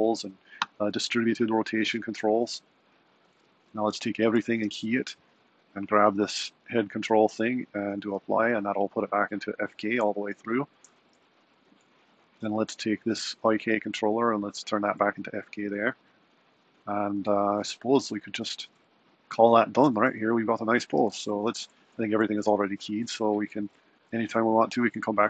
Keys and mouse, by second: 0.1 r, 1.6 r, 4.3 a, 4.6 i, 5.7 click, 9.4-10.1 drag, 10.1-12.8 shift+middle drag, 13.0-16.9 middle drag, 21.1 a, 21.4 i, 24.0 Left, 24.6 Right.